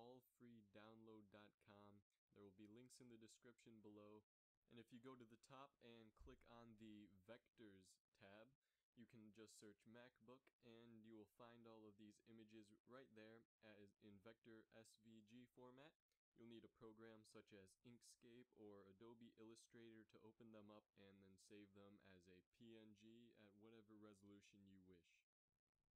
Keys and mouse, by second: 0.0-5.3 drag, 9.1 KP_3, 9.5 KP_5, 10.0 KP_1, 11.0 KP_7.